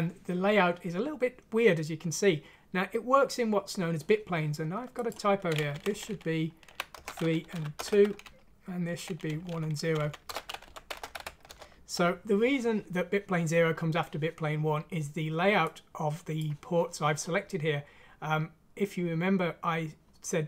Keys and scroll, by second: 5.7 Left, 5.9 Left, 6.1 Left, 6.7 Right, 7.1-9.1 typing, 7.5 End, 9.1 Up, 9.3 Down, 9.5 Down, 9.7 Left, 10.0 Left, 10.4-11.5 typing.